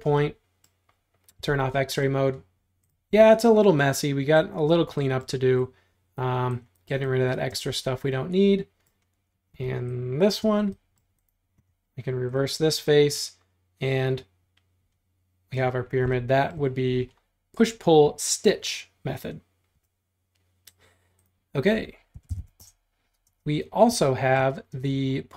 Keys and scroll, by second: 0.0 space, 1.4 x, 3.1 e, 7.5 space, 9.6 e, 10.5 space, 19.8 r, 21.9-23.3 typing.